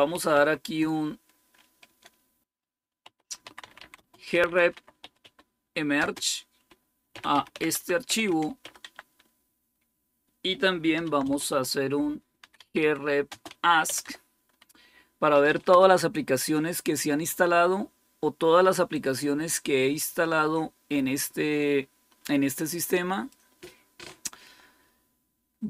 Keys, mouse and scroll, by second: 0.0-0.7 typing, 2.4-9.0 typing, 10.6-14.4 typing, 15.6 typing, 18.8-23.2 drag.